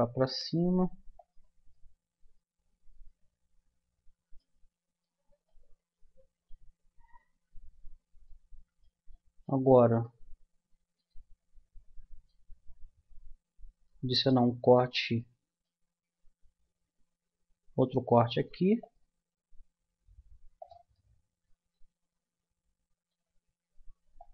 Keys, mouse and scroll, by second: 1.7-3.8 middle drag, 5.0-8.6 middle drag, 13.1 middle click, 13.9 middle click, 14.2-15.2 middle drag, 15.4-17.2 middle drag, 18.2 ctrl+r, 24.2-24.3 drag.